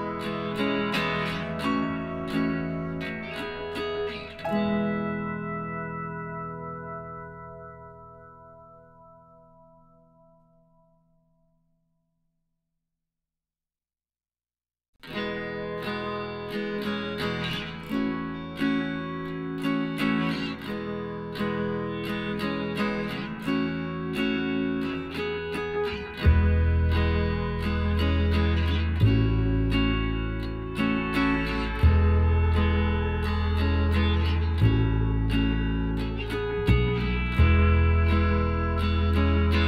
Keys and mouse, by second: 5.8-7.5 drag, 8.0 middle click, 8.1 click, 8.4-9.7 middle drag, 11.2-13.2 middle drag, 11.9 a, 13.9 KP_Divide, 14.6 a, 14.9 middle click, 15.4 a, 15.8 Tab, 16.4 right click, 19.6-21.3 drag, 23.4-24.5 middle drag, 24.5 click, 25.2 a, 25.7 click, 26.5 ctrl+z, 26.8 ctrl+z, 27.4 a, 30.6-34.1 middle drag, 37.3 middle click, 38.3 KP_1, 38.8 middle click.